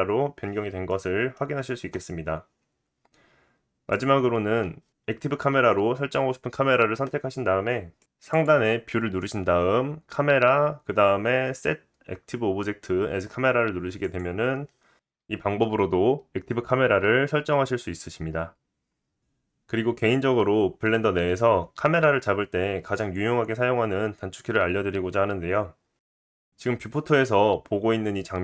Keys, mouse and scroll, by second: 0.9-3.9 middle drag, 3.9 click, 8.3-16.9 drag, 16.0 g, 16.9-28.4 middle drag, 25.5-26.5 scroll up 2.